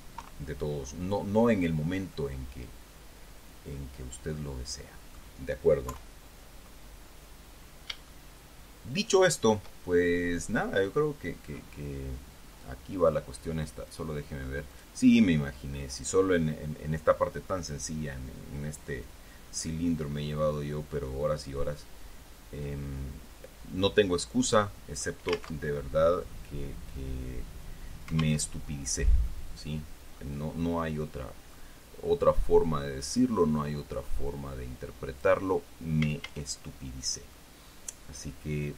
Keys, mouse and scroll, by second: 0.5 KP_3, 2.5-5.7 middle drag, 6.2 KP_3, 7.9 scroll up 2, 8.4-9.9 shift+middle drag, 9.9 shift+scroll up 1, 14.2 click, 15.0 click, 20.8-25.5 drag, 25.9 alt+Tab, 28.8 alt+Tab, 29.6-30.6 drag, 31.0-32.1 drag, 32.2-32.6 scroll up 1, 33.4 right click, 34.1-35.7 drag, 36.3 a, 37.3 scroll down 1, 37.7-38.7 middle drag.